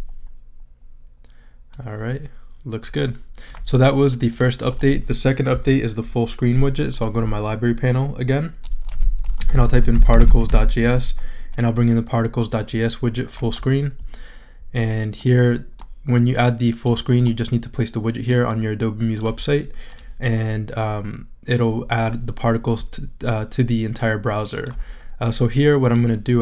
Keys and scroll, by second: 5.5 BackSpace, 9.1-10.9 typing.